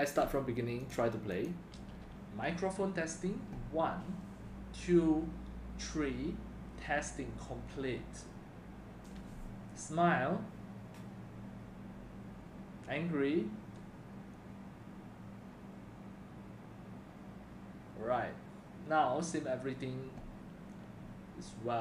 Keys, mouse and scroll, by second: 0.9 click, 1.3 click, 3.2-4.0 drag.